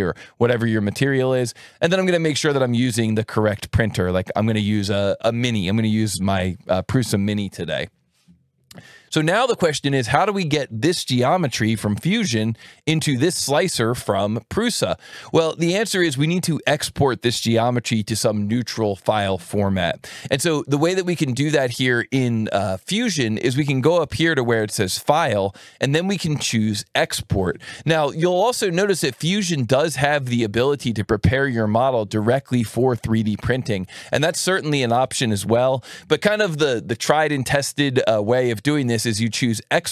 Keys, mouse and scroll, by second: 0.8 click, 2.0 click, 2.9 click, 3.5-4.4 scroll up 2, 4.4 scroll down 2, 4.5 scroll up 2, 4.7-5.8 scroll down 2, 6.3-7.8 middle drag, 7.8-9.2 scroll up 2, 10.3 click, 12.7 click, 23.5 click, 38.8 click.